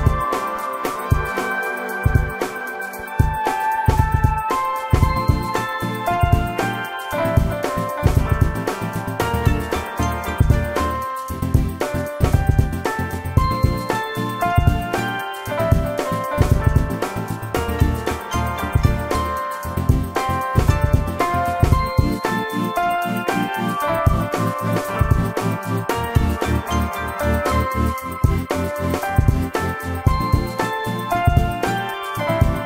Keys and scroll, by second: 14.1 ctrl+g, 15.6 shift+s, 22.0 shift+f, 24.7 space, 25.6 Delete, 29.0 p, 32.3 space.